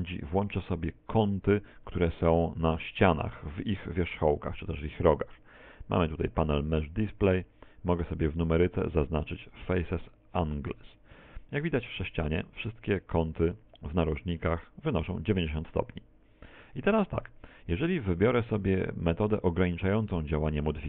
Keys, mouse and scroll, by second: 5.1-6.9 scroll down 4, 10.3 click, 11.9-12.5 scroll up 3, 12.9 shift+middle click, 14.0 middle click.